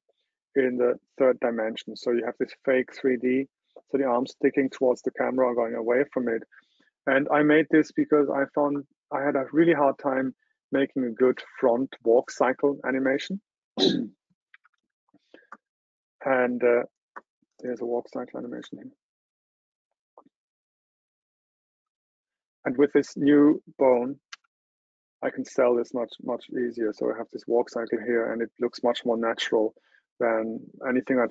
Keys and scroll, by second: 14.5 super+Tab.